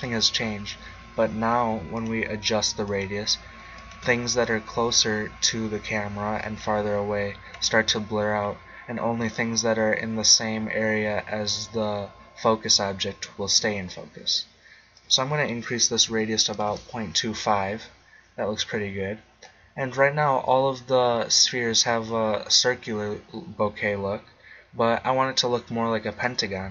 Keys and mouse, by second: 1.9 click, 4.3-5.7 drag, 6.4 click, 8.5 middle click, 14.9 click, 17.1 middle click.